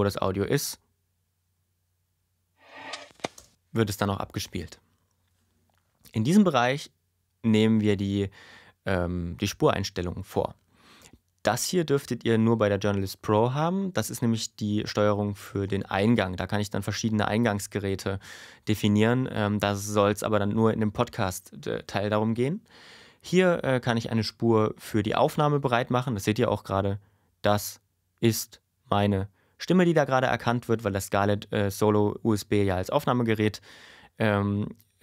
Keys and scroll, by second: 3.3 space.